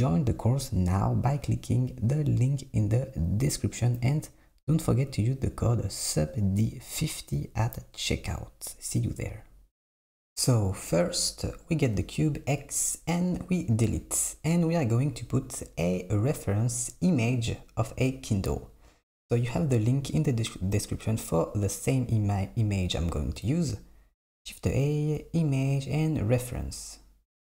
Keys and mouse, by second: 3.7 e, 6.1 Tab, 6.4 s, 6.9 click, 8.4 Tab, 9.4 click, 10.9 click, 12.0 x, 23.0 shift+a.